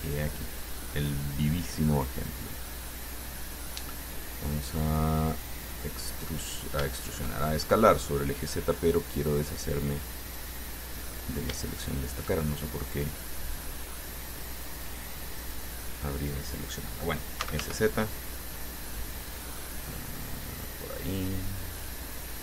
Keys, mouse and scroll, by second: 0.2 click, 2.0 click, 2.5 scroll down 1, 3.0-5.2 drag, 6.1 click, 6.8 scroll up 1, 7.1 shift+click, 7.7 shift+scroll up 1, 10.5 click, 11.2 middle click, 11.9 shift+right click, 12.5-14.8 shift+middle drag, 15.7 click, 17.4-18.4 typing, 20.8 click, 21.8-22.4 drag.